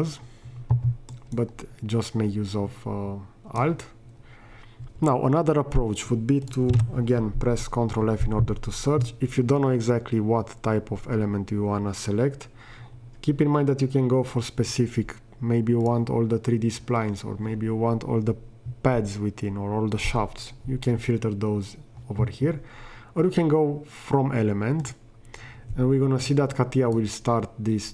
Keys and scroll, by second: 6.8 ctrl+f.